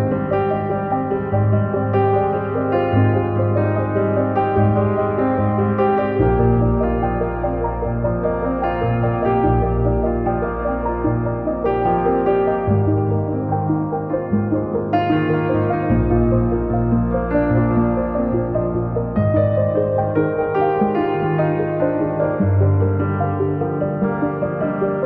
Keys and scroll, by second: 0.3 m, 11.4 space, 11.5 Escape, 15.4 Delete, 17.1 space, 17.2 Escape.